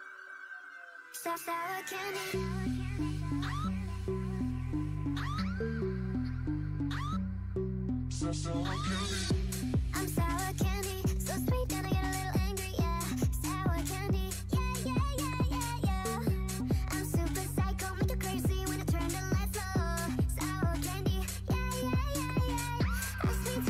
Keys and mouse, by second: 0.0-1.7 typing, 3.1 c, 4.0 w, 4.9 a, 5.4 c, 6.4 w, 7.1 a, 8.3 a, 8.6 a, 8.7 c, 10.8-13.5 right drag, 10.9 w, 12.4 w, 13.5 a, 14.4 Tab, 15.3 Tab, 16.2 c, 17.1 w, 17.5 Tab, 18.4 Tab, 18.8 a, 19.0 c, 19.5-21.5 drag, 19.8 Tab, 20.5 w, 20.9 a, 21.2 Tab, 21.7 Tab, 22.0 w, 23.0 c.